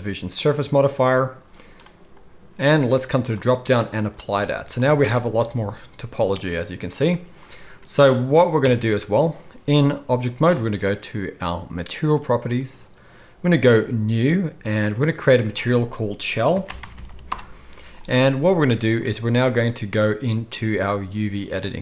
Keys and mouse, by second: 5.0 Tab, 8.6 Tab, 12.2-14.7 drag, 17.0 l, 18.5 middle click.